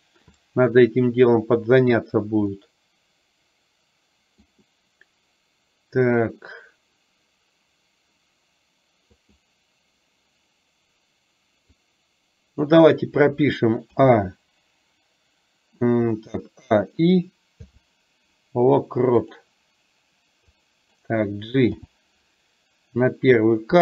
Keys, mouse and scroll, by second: 2.6-4.5 middle drag, 9.2 click, 11.7-12.7 drag, 20.6-21.0 drag.